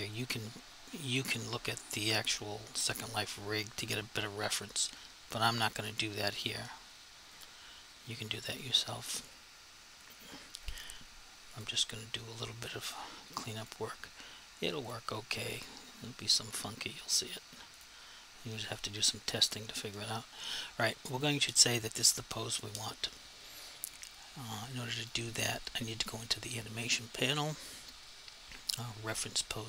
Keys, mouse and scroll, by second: 1.5 r, 7.4 click, 7.8 r, 11.6 click, 14.0 click, 14.9 click, 25.1 click.